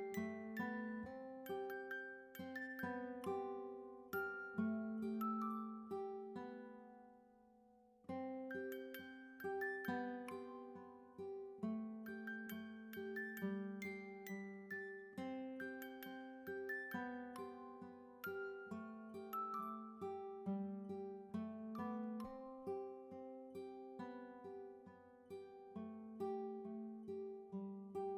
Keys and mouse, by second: 1.6 click, 3.0 click, 4.2 click, 5.9 click, 6.7 click, 8.1 click, 8.2 click, 8.2 p, 8.8 BackSpace, 10.2 click, 10.7 BackSpace, 11.3 Return, 12.7 click, 18.7 click, 20.3 click, 24.2 click.